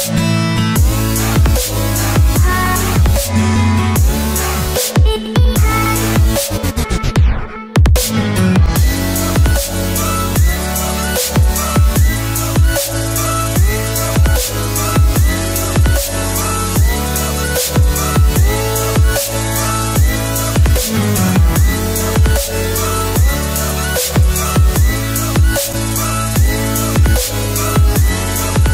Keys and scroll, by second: 22.7 ctrl+g, 25.7 Return.